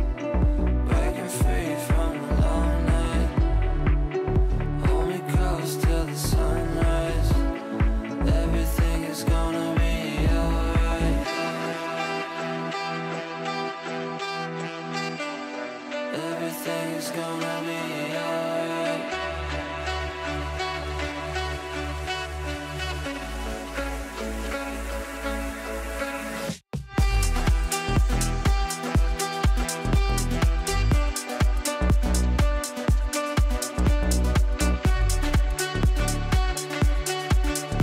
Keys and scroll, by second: 1.4 Delete, 7.7 Delete, 13.2 Delete, 19.0 Delete, 32.9 shift+F2, 33.1 F3.